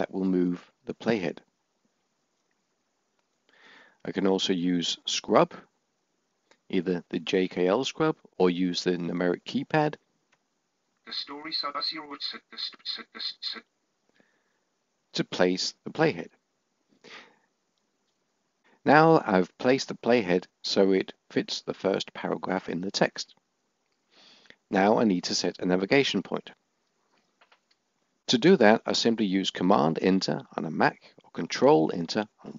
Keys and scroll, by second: 0.6 Right, 28.5 Return.